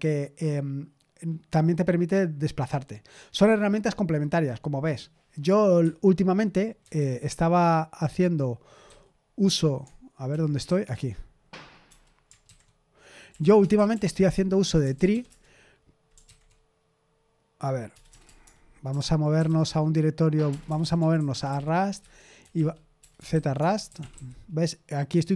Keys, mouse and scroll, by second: 5.8 Escape, 6.9 super+h, 8.8 q, 10.2 super+l, 10.6 q, 11.8 BackSpace, 12.4 ctrl+c, 13.0-15.5 typing, 16.2 ctrl+c, 17.9-24.6 typing, 21.9 Return.